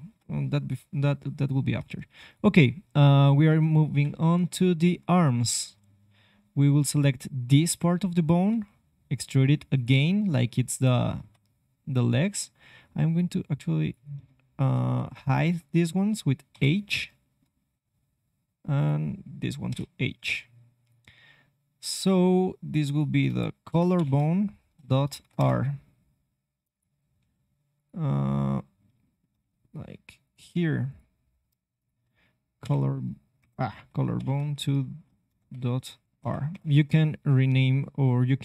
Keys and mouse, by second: 1.2-2.2 middle drag, 3.9 KP_1, 8.5 e, 9.8-13.1 drag, 11.1 c, 14.2 middle click, 14.8 c, 15.6-17.3 drag, 16.5 h, 17.1 middle click, 17.3 middle click, 18.7-20.7 drag, 19.6 h, 20.8-25.3 drag, 26.7-27.7 drag, 27.1 e, 29.3 g, 33.8-36.5 drag.